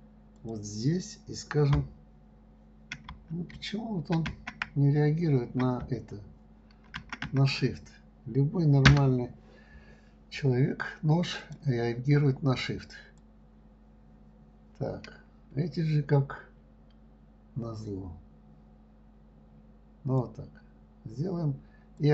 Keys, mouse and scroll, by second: 11.8-13.8 drag.